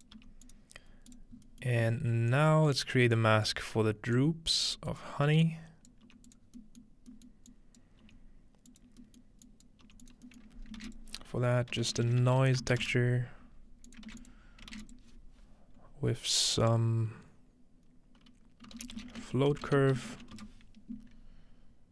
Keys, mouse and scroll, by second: 0.0-0.7 typing, 1.0-1.7 drag, 1.4-3.8 scroll up 1, 1.8 click, 2.3 click, 3.2 click, 3.8-5.5 scroll down 1, 4.2-4.7 drag, 4.7 g, 5.0-8.7 drag, 6.1 typing, 6.4-8.4 scroll down 1, 8.1 typing, 8.8-9.5 drag, 8.9-10.3 scroll down 1, 9.8 click, 10.6 scroll up 1, 10.8-14.8 typing, 10.9 shift+click, 11.7 shift+click, 11.7-12.5 shift+scroll up 1, 13.9 click, 14.3 shift+click, 14.9 shift+click, 18.7-20.8 typing.